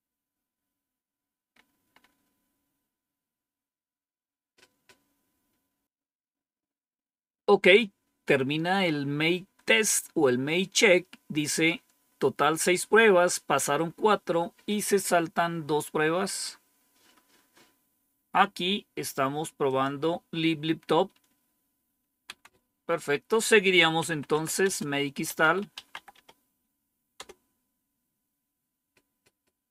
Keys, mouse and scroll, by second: 1.4-3.0 scroll up 1, 3.0-3.9 scroll down 1, 19.6 click, 20.8 Up, 22.2 Down, 23.7-26.6 typing, 27.1 Return.